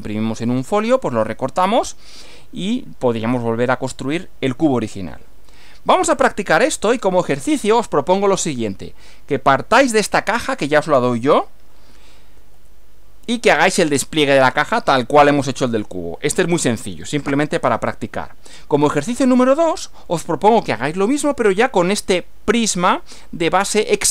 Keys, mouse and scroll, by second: 4.1 scroll down 2, 6.9 click, 12.4 Right, 19.5 Right.